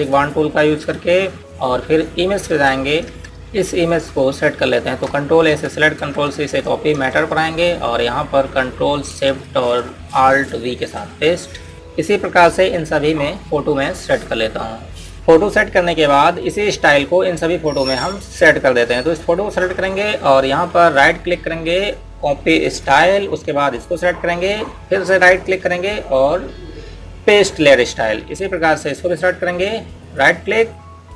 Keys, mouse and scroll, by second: 0.8 click, 3.5 Tab, 6.3-7.3 typing, 7.8 Tab, 11.7 click, 14.7 click, 29.9 click, 30.9 right click.